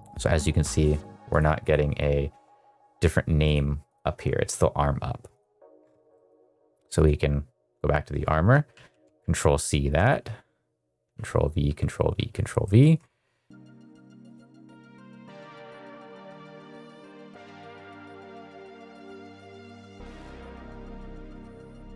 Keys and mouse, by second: 0.2 click, 0.8 drag, 1.2 click, 1.5 drag, 3.8 drag, 6.1 middle click, 6.9 click, 8.6 ctrl+c, 11.1 ctrl+v, 11.6 ctrl+v, 12.1 ctrl+v, 12.6 middle click, 13.5 middle click, 13.8 click, 14.4 middle click, 14.4 middle click, 14.6 middle click, 14.8 middle click, 14.9 shift+middle click, 15.0 click, 15.2 middle click, 15.5 ctrl+c, 15.6 shift+middle click, 15.8 click, 16.0 middle click, 16.5 ctrl+v, 16.6 ctrl+v, 16.7 ctrl+v, 17.0 click, 17.4 middle click, 17.5 middle click, 17.7 shift+middle click, 17.9 click, 18.1 middle click, 18.1 middle click, 18.2 middle click, 18.3 middle click, 18.5 click, 18.8 middle click, 19.1 ctrl+v, 19.3 ctrl+v, 19.6 ctrl+v, 19.7 middle click, 19.8 shift+middle click, 19.9 middle click, 20.0 click, 20.3 click, 20.4 click, 21.1 shift+middle click, 21.3 middle click, 21.4 middle click, 21.6 click.